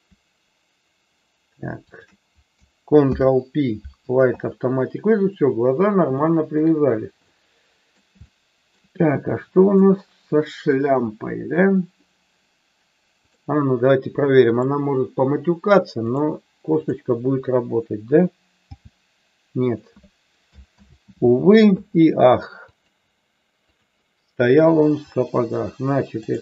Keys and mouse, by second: 1.9 shift+click, 3.0 ctrl+p, 6.1 shift+middle click, 7.2-8.0 middle drag, 8.2-8.7 shift+middle drag, 9.7 click, 14.5-16.2 drag, 18.6 g, 19.5 click, 20.6 ctrl+z, 22.6-23.8 drag, 24.3 click, 26.2 click.